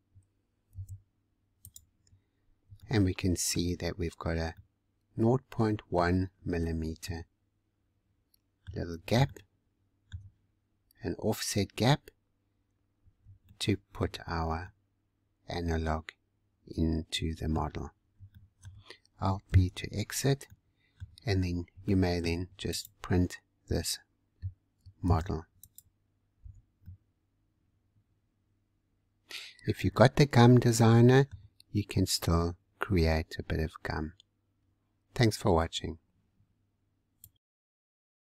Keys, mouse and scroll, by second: 2.3 scroll up 3, 2.8 shift+middle click, 3.7-4.5 scroll down 3, 4.5-6.4 middle drag, 6.4-7.0 scroll up 1, 7.0-10.6 middle drag, 10.6-11.7 scroll up 1, 11.7 scroll up 1, 11.8-12.8 scroll down 4, 12.8-13.4 scroll down 3, 13.4-17.6 shift+middle drag, 17.7 scroll down 2, 18.3-19.4 shift+middle drag, 19.4 alt+b, 19.8-20.2 scroll down 4, 20.4 middle click, 21.4-21.8 scroll up 4, 21.8 shift+middle click, 22.7 click, 25.1 ctrl+z, 25.6 click, 26.8-29.8 middle drag, 31.5-34.3 scroll down 2.